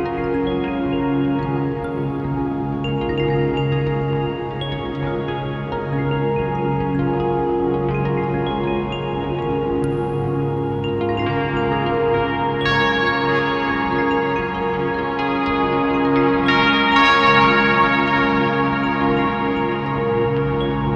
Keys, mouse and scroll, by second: 4.4 click, 7.6 click, 15.6 click, 20.4 click.